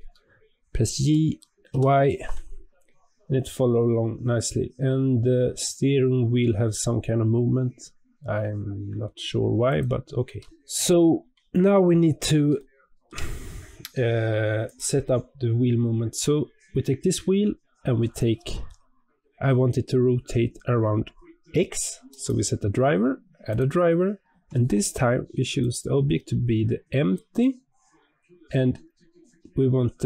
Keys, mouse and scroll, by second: 0.9 g, 10.3 scroll down 1, 10.4-12.5 scroll up 2, 12.5-14.6 shift+middle drag, 14.6 click, 16.8-18.2 scroll down 1, 22.0-30.0 right drag.